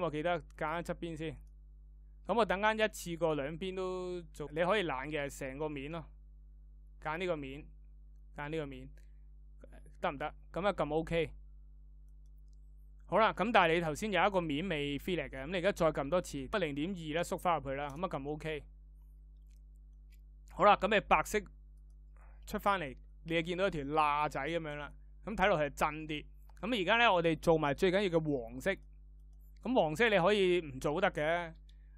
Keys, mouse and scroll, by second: 14.2-16.2 ctrl+drag.